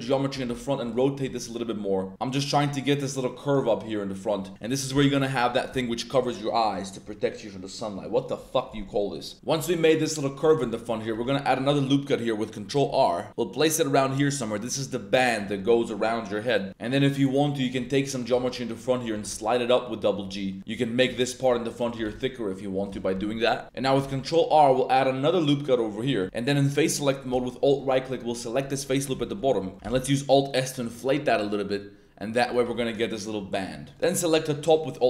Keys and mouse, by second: 0.3 r, 0.8 click, 1.2 g, 4.5 click, 5.0 click, 9.3 click, 9.6 Tab, 10.2 click, 10.6 Tab, 10.6 middle click, 11.1 ctrl+r, 14.0 click, 17.0 middle click, 18.1 shift+click, 18.3-18.9 drag, 19.1 g, 19.3 g, 20.5 click, 20.9 shift+drag, 21.2 drag, 21.9 g, 22.1 g, 22.9 click, 23.6 1, 24.0 ctrl+r, 26.0 click, 26.2 a, 27.7 alt+click, 28.7 click, 29.2 shift+click, 29.7 click, 29.8 alt+s, 32.4 shift+click, 32.8 Tab, 32.8-33.3 drag, 33.6-33.9 drag, 33.9 alt+1, 34.9 alt+right click.